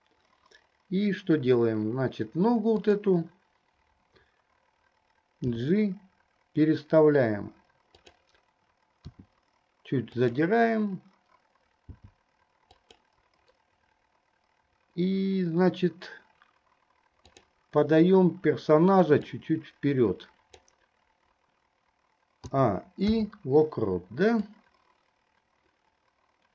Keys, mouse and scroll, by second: 2.9 click, 5.5 g, 9.3 r, 11.9 g, 17.3 click, 19.6-21.0 drag, 22.6 a, 23.4 i, 24.7-26.5 drag.